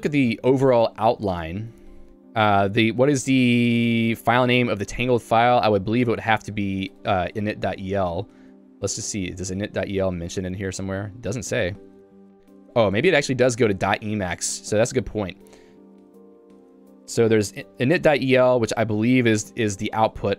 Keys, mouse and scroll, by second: 11.6 ctrl+g, 12.0 Escape, 12.2 Escape, 18.2 Return, 19.2 shift+g.